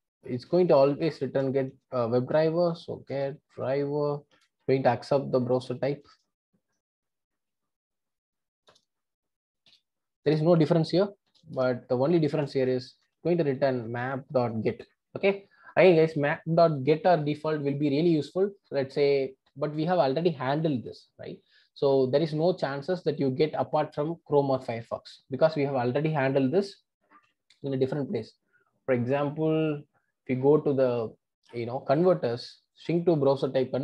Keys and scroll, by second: 1.1 Return, 8.7 Return, 13.0 Return.